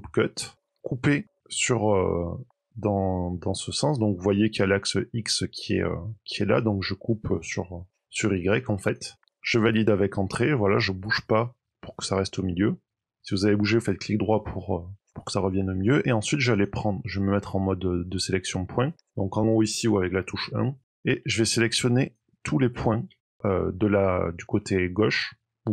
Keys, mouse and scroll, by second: 0.7 ctrl+r, 15.0 middle click, 16.4 click, 17.4 middle click, 20.9 click, 21.4 shift+click, 22.0 shift+click, 23.0 click, 23.1 middle click.